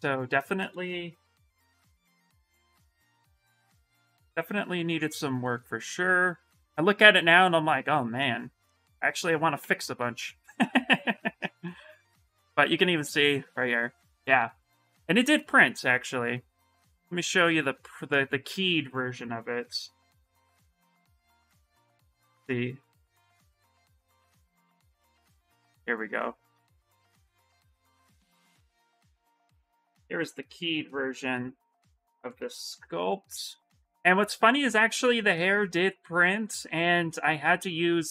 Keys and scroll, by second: 1.2 shift+s, 32.5 ctrl+n, 37.2 s.